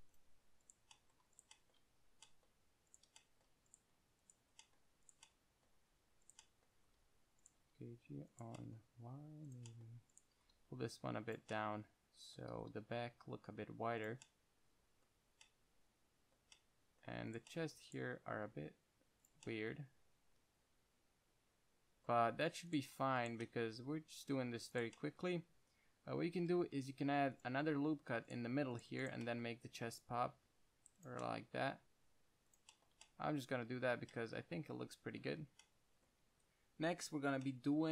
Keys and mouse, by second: 0.5 click, 1.2-2.6 middle drag, 7.1 g, 7.9 g, 9.2 g, 9.8-12.0 drag, 9.8-12.0 right drag, 10.6 g, 12.0 middle drag, 12.8 g, 14.4 click, 15.6 Tab, 16.7 Tab, 18.6 g, 19.6-20.1 middle drag, 23.0-24.0 drag, 24.0 g, 25.1 drag, 25.7-26.1 drag, 26.6 drag, 27.0 ctrl+r, 28.6-30.6 drag, 29.8 g, 31.4-34.1 drag, 31.7 g, 33.3 Tab, 34.3 Tab.